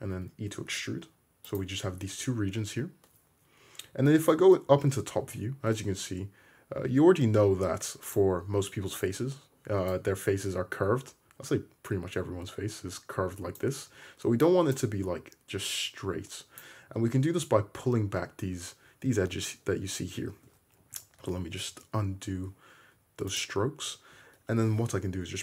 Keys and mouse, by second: 0.2 e, 8.2-20.3 right drag, 20.3-25.4 shift+drag, 21.3 ctrl+z, 21.7 ctrl+z, 24.8 g.